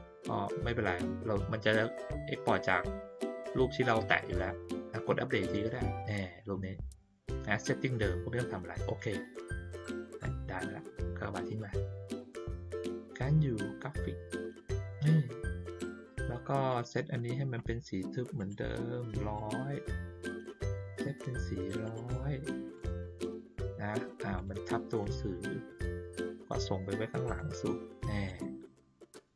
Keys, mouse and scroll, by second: 5.4 click, 8.8 click, 11.4 click, 12.7-14.9 drag, 15.6 middle click, 16.6 click, 18.3 right click, 19.3 click, 20.2 click, 21.8 right click, 22.7 click, 24.3 click, 25.0 click, 27.2 click, 28.2 click, 29.1 click.